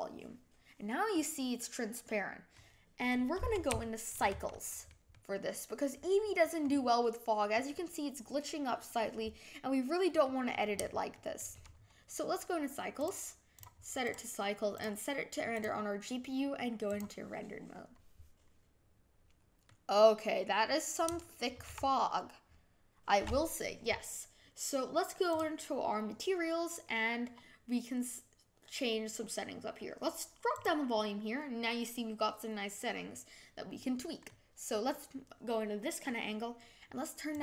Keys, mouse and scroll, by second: 1.1-3.0 middle drag, 3.0-3.7 scroll up 3, 3.8-4.2 shift+middle drag, 4.2 scroll down 2, 4.5-6.6 middle drag, 6.6-7.5 scroll up 3, 7.5-11.7 middle drag, 11.7-12.4 scroll down 2, 14.1-17.4 drag, 19.6-37.4 middle drag.